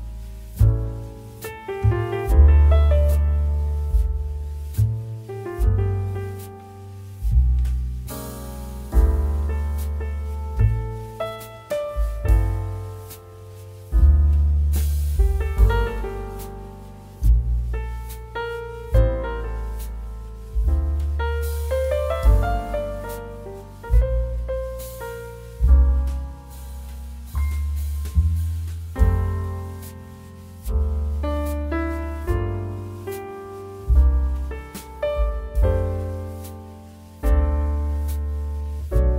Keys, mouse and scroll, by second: 2.3 click, 4.9 ctrl+r, 5.7 click, 9.0 click, 10.0 ctrl+r, 10.6 click, 17.2 click, 18.6 ctrl+r, 19.4 click, 23.9 click, 26.0 s, 30.3 click, 34.4 alt+click, 35.7 s, 37.0 click, 37.6 g, 37.6 z.